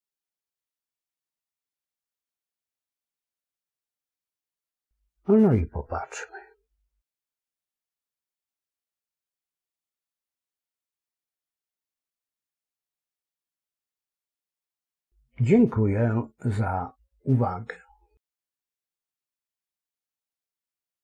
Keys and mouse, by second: 1.3 click, 4.3 KP_5, 7.1-12.4 KP_6.